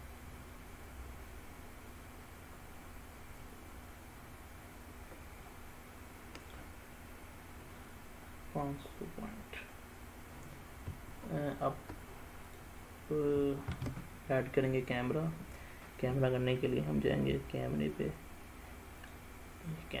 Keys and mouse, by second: 0.2-2.9 middle drag, 3.4-5.6 middle drag, 7.9-9.0 middle drag, 12.5 click, 13.7 shift+a.